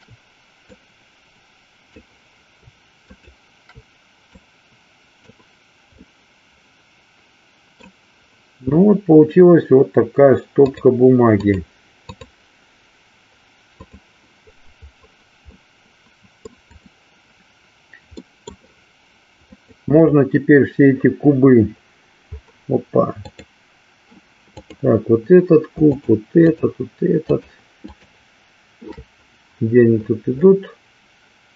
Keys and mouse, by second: 0.6-2.1 drag, 3.0 shift+click, 4.4-5.4 drag, 6.0-8.0 middle drag, 13.7 click, 15.6-16.7 middle drag, 16.9 click, 18.2 middle click, 19.5 click, 23.1 click, 25.9 shift+click, 26.5 shift+click, 27.2 shift+click, 28.0 shift+click.